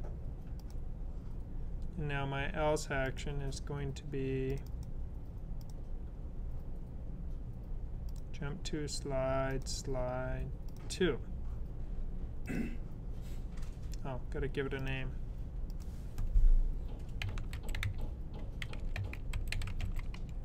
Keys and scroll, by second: 16.8-20.4 typing.